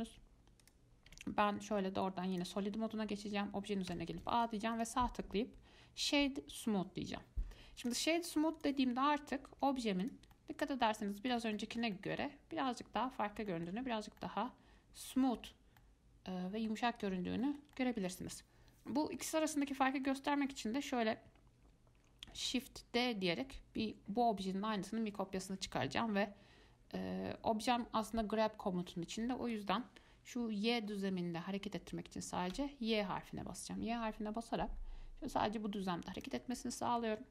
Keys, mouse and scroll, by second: 0.3 z, 1.3 z, 4.1 a, 5.0-8.8 right drag, 8.8 click, 9.7 Tab, 10.2 click, 10.6-12.6 middle drag, 12.6-13.6 shift+scroll down 3, 13.7-14.1 shift+middle drag, 14.1-14.4 scroll up 2, 14.4-15.6 middle drag, 15.6 scroll down 2, 16.0-17.2 middle drag, 17.2 click, 17.6-22.7 shift+middle drag, 22.7 shift+d, 36.8-37.3 middle drag.